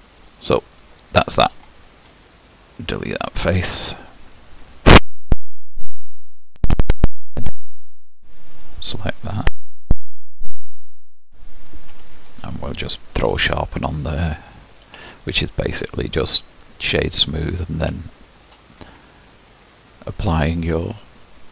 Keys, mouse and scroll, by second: 0.0 click, 1.1-2.1 shift+middle drag, 2.1 Delete, 5.3 2, 6.1 alt+click, 7.0 e, 9.4 alt+click, 10.1 g, 11.9 Tab, 13.5 q, 15.1-16.2 shift+middle drag, 16.2-16.8 scroll down 1, 16.8-19.7 middle drag, 19.7-21.5 drag.